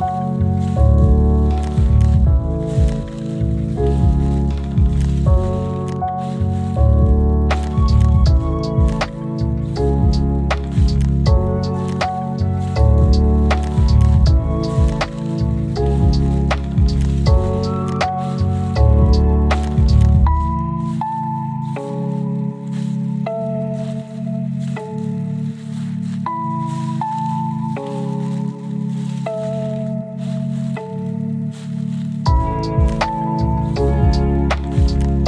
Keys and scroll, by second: 5.9 ctrl+z, 6.8 ctrl+z.